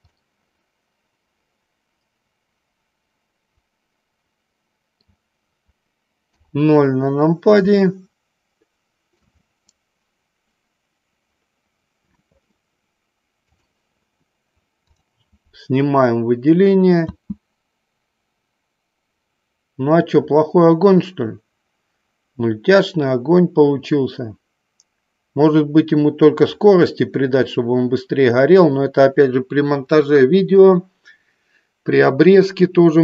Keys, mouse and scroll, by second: 0.0 click, 0.2 scroll up 2, 0.3-1.7 middle drag, 2.1-2.6 middle drag, 2.6 scroll down 1, 2.8-5.2 middle drag, 6.3 KP_0, 7.9-9.6 shift+middle drag, 13.4 click, 15.0 click, 17.3 space.